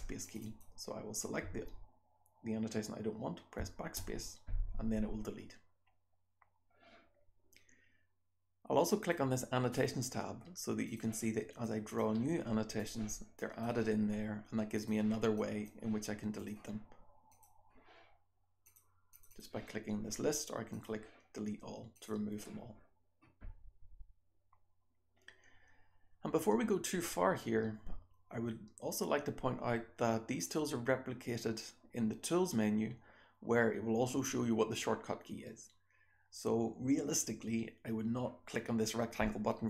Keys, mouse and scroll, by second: 0.2 click, 0.2-0.5 scroll down 1, 0.4 click, 3.6 BackSpace, 8.9 click, 8.9 scroll down 1, 10.8 click, 10.9 scroll down 1, 11.6 click, 12.7 click, 13.4 drag, 13.4-14.7 scroll down 2, 14.7 click, 14.7-15.4 scroll down 1, 15.4 click, 15.4-16.3 scroll down 1, 16.3 click, 16.3-17.2 scroll down 1, 17.2 click, 17.2 scroll down 1, 19.1 click, 19.3 click, 20.6 click, 30.4 click.